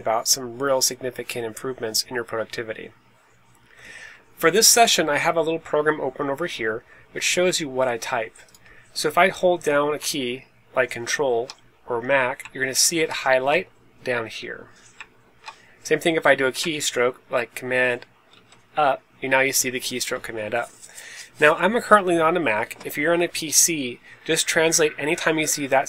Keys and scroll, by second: 18.2 super+Page_Up.